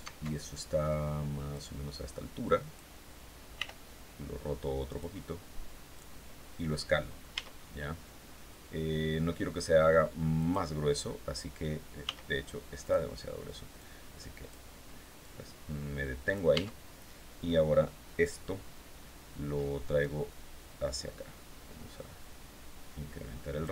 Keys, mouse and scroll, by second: 1.0-2.4 drag, 3.0 r, 4.3 click, 5.4-6.4 drag, 6.8 s, 9.8 click, 11.5 s, 12.3 click, 13.2 click, 14.6-16.0 drag, 16.0 Tab, 19.4-20.4 drag, 20.4 scroll down 2, 20.9 scroll down 2, 23.5 alt+Tab.